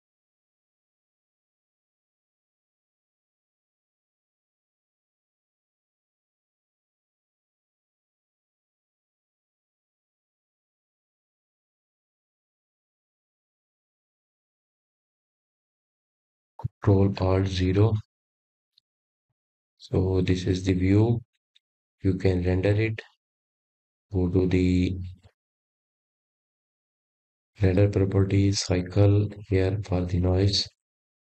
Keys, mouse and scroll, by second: 0.4-3.4 drag, 4.3 click, 6.4-7.5 drag, 8.2 click, 8.8 click, 9.5-9.8 scroll up 2, 10.1-10.7 scroll down 3, 10.8-13.3 middle drag, 13.3 KP_0, 15.3-19.7 shift+middle drag, 22.3 ctrl+alt+KP_0, 28.9 click.